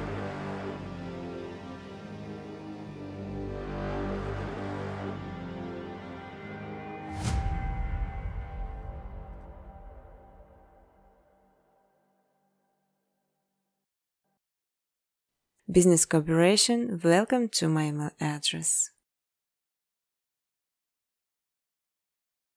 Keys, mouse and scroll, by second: 0.0-0.5 typing, 1.3 Tab, 1.6-2.6 typing, 4.3-5.4 typing, 7.2 space, 7.5 space, 8.9 space, 9.1 space, 10.7 space, 11.0 space, 11.7 space, 12.7 click, 13.7 click, 13.7-15.2 typing, 16.2 click, 17.0 click, 17.2 click, 18.4 click, 19.4-22.5 typing, 21.6 Tab.